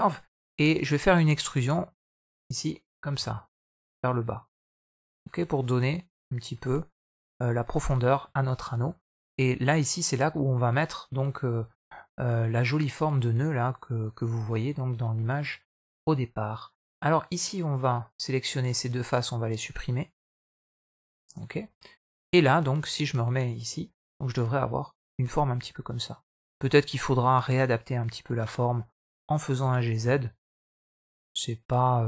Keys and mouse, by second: 0.1 middle click, 0.7 shift+middle click, 1.5 middle click, 3.0 e, 8.2 middle click, 9.5 click, 11.4 shift+middle click, 13.4-15.2 middle drag, 16.7 click, 17.9 middle click, 19.3 shift+click, 20.3 x, 21.4 middle click, 22.9 Tab, 23.2-25.3 middle drag, 25.3 Tab, 26.2 middle click, 26.9 middle click, 27.5 alt+click, 28.1 middle click, 29.4 g.